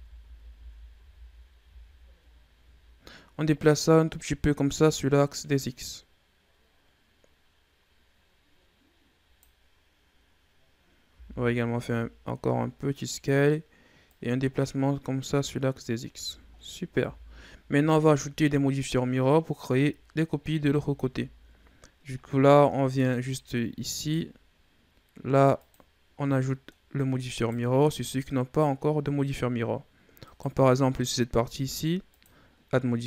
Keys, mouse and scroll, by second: 0.3 ctrl+z, 0.6 ctrl+z, 1.3 ctrl+z, 3.3-6.4 drag, 10.9 s, 13.9-16.1 drag, 16.1 Tab, 16.4-16.9 scroll down 4, 16.9 a, 17.1-17.9 scroll down 2, 17.9 scroll down 2, 18.5-19.5 scroll up 5, 20.4 ctrl+s, 21.2-22.0 scroll up 5, 22.0-22.4 scroll down 1, 22.4-23.2 middle drag, 23.2-23.8 scroll up 1, 23.8 right click, 25.4-26.1 drag, 26.1 scroll down 2, 26.3 middle click, 26.7-27.2 scroll up 2, 27.2 right click, 27.9 right click, 30.1 right click, 32.0-33.0 drag.